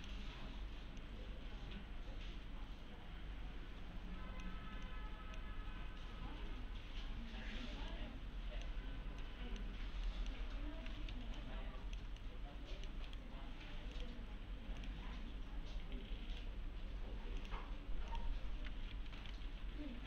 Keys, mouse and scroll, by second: 5.7-6.4 scroll down 1, 6.4 scroll up 1, 6.7-7.3 scroll down 1, 7.3-7.9 scroll up 1, 7.9-8.9 middle click, 8.7 scroll down 1, 9.2-9.8 middle click, 9.7 scroll down 1, 10.1 middle click, 10.5-11.0 scroll up 1, 11.1 alt+z, 11.4-12.0 alt+click, 12.2-13.4 middle click, 13.1 right click, 14.0 click, 16.3 right click, 17.4 click, 19.2 ctrl+c.